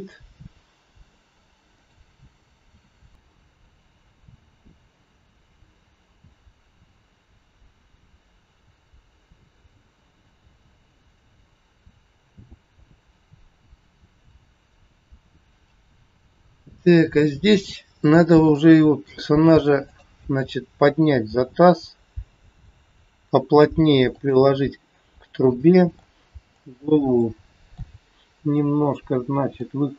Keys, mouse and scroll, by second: 2.6 a, 3.1 click, 16.7 click, 17.6 scroll up 2, 18.6 shift+middle click, 19.7 click, 21.1 g, 24.5 scroll up 1, 25.4 middle click, 25.4 scroll up 1, 26.5 click, 27.2 middle click, 28.4 scroll down 4, 28.5 middle click.